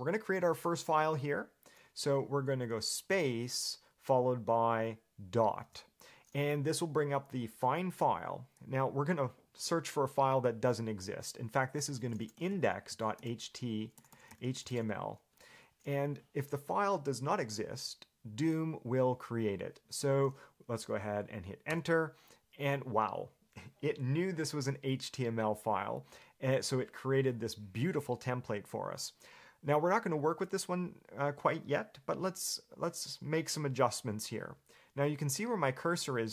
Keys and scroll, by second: 11.9-15.4 typing, 22.0 Return.